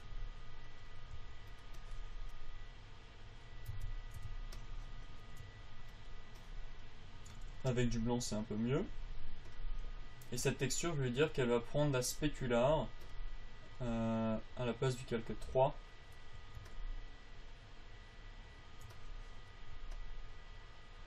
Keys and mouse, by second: 1.1 click, 1.5 f, 4.1 Tab, 4.6 Tab, 7.9 f, 19.3-21.0 drag.